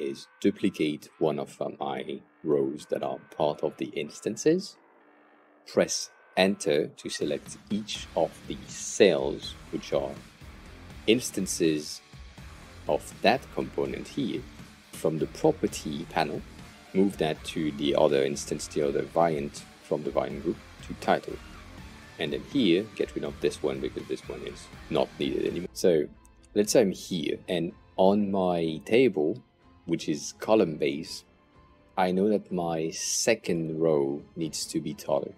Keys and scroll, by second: 2.7 super+d, 6.2 Return, 23.6 Delete.